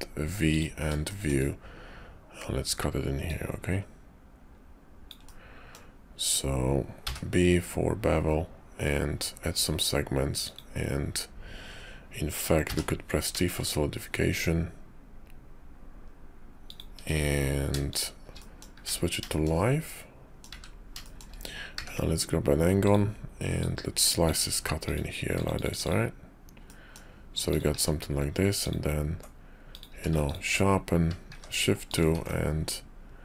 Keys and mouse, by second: 1.0 shift+middle click, 3.1-10.6 drag, 19.3 shift+middle click, 19.9 middle click, 20.5 `, 21.0 shift+middle click, 21.7 d, 23.6 click, 26.7 middle click, 27.5 click, 27.7 q, 28.6 click, 29.6 click, 29.9 q, 31.3 shift+2, 31.9 click, 32.1 alt+x.